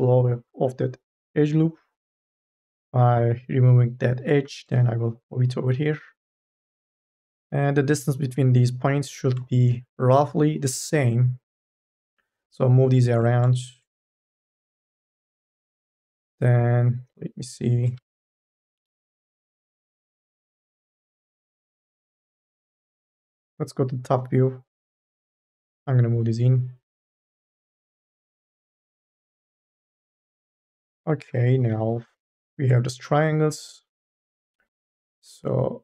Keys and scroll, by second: 6.7 e, 15.5 2, 17.8 1, 18.6 m, 19.0 o, 22.9 e, 30.8 1, 31.5 m.